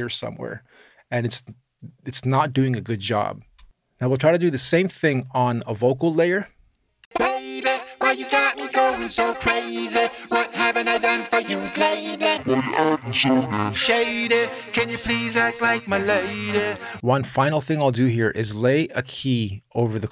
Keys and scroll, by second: 6.8 space.